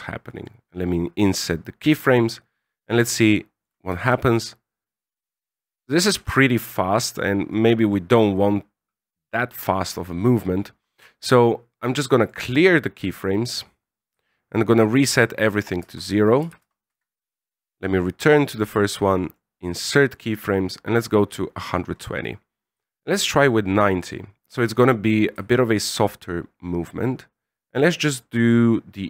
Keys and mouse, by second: 2.0-3.6 drag, 3.8 alt+a, 6.1 alt+a, 7.5 click, 9.5-12.2 right drag, 14.0 ctrl+click, 14.8-17.3 ctrl+drag, 18.4 click, 19.2 right click, 20.7-21.6 drag, 22.7-24.5 ctrl+drag, 25.2-29.0 ctrl+drag.